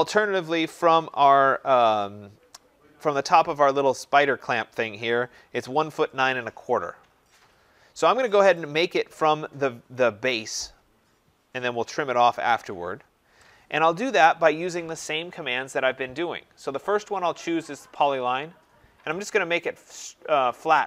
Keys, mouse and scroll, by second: 16.8 click, 17.6 scroll, 19.1 click.